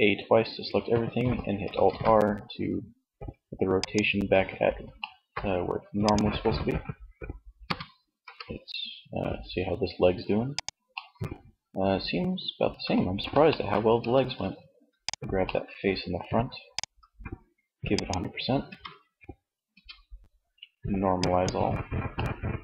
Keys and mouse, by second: 0.9 alt+r, 5.2 click, 5.7 click, 6.5 r, 9.5 click, 9.9-11.5 middle drag, 13.2 Tab, 17.6 Tab, 18.7 Tab.